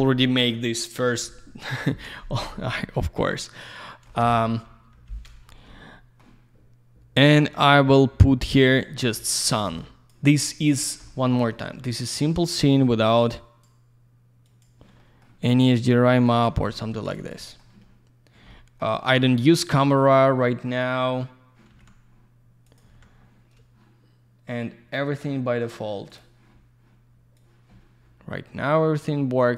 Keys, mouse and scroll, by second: 1.1 F3, 2.4 alt+middle click, 3.8 alt+middle click, 4.2 F4, 5.5 scroll down 1, 5.7 alt+middle click, 7.3 click, 7.3 click, 8.4 click, 8.5 click, 8.7 alt+middle click, 9.1 middle click, 9.5 click, 10.5 click, 10.6 click, 10.8 scroll down 1, 11.0 alt+middle click, 11.6 middle click, 13.4 click, 14.4 click, 14.6 click, 15.0 alt+middle click, 16.1 click, 16.2 click, 16.7 alt+middle click, 17.0 alt+z, 17.1 click, 17.3 click, 17.6 alt+double middle click, 19.5 middle click, 21.8 alt+w, 22.7 click, 22.8 click, 22.9 alt+w, 26.1 click, 26.2 click, 27.4 click.